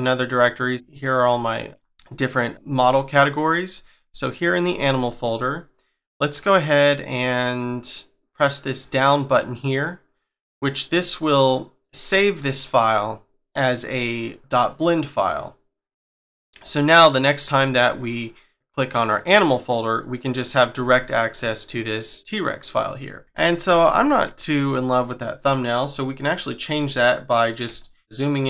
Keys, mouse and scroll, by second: 0.7-1.2 scroll down 5, 1.2-1.7 scroll up 5, 1.7-2.4 scroll down 2, 2.4-2.9 scroll up 1, 2.9-3.3 scroll down 1, 3.3-4.1 scroll up 1, 4.1 click, 8.8 click, 16.6 click, 19.1 click, 26.2-26.8 scroll up 3, 26.8 shift+middle click, 27.7-28.0 scroll up 3, 28.0 middle click.